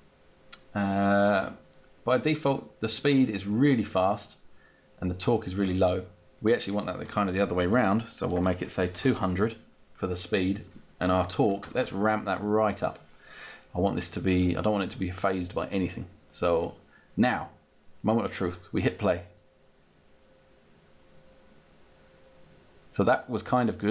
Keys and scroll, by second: 8.1-9.0 typing, 11.5 0.